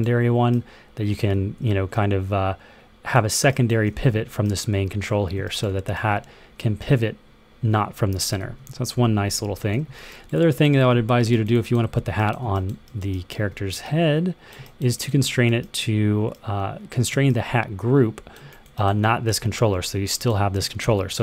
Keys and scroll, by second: 1.2 super+z, 3.7 w, 5.0 e, 7.0-8.8 typing, 8.8 super+z, 10.6 w.